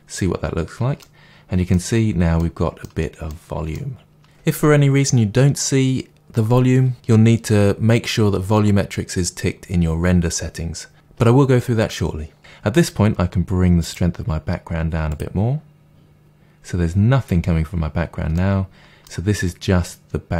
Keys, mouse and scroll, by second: 1.0-13.8 middle drag, 4.2-7.8 scroll up 2, 7.8-12.8 scroll up 1, 12.8-13.8 scroll up 1, 13.8-18.3 drag, 18.3-20.3 middle drag.